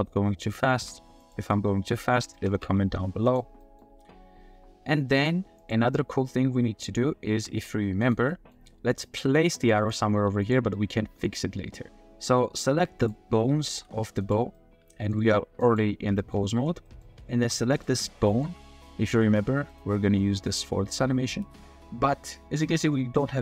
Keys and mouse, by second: 0.0-0.9 typing, 1.5-2.1 middle drag, 2.3 shift+middle click, 2.6 g, 3.2 click, 3.9 g, 5.6-6.8 drag, 7.3 g, 8.3 drag, 8.9 click, 9.6 g, 9.9 drag, 10.2 g, 10.7 click, 11.0 g, 11.2-12.0 drag, 13.0 click, 13.7 g, 14.5-15.1 drag, 15.2 r, 16.2 click, 16.8 click, 17.0-18.3 middle drag, 18.3 click, 18.4-19.7 middle drag, 18.7 g, 19.7-20.0 drag, 20.0 middle click, 20.4 middle click.